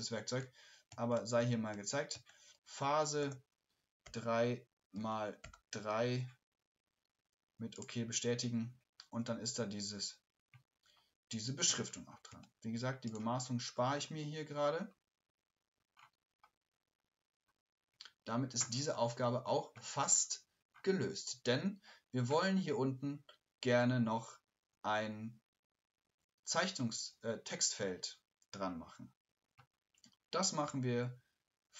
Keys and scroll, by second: 0.4-2.2 typing.